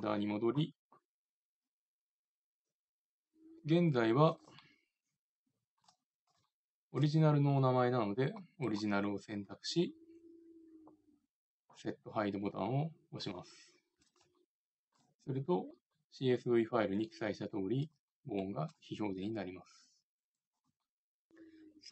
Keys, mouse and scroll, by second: 4.6-8.6 middle drag, 8.6-15.1 drag, 14.4-20.1 middle drag, 21.0-21.9 middle drag.